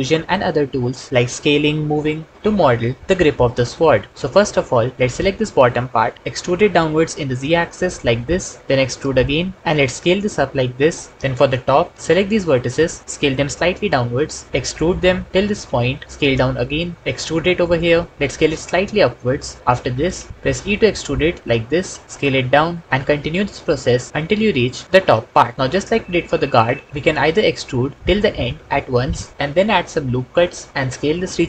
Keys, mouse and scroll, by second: 4.9 alt+z, 6.5 e, 6.6 z, 7.5 z, 8.7 e, 8.8 z, 9.6 z, 9.6 s, 13.1 s, 14.2 click, 14.5 e, 16.0 s, 17.0 e, 20.4 e, 22.1 s, 23.2 e, 28.0 e.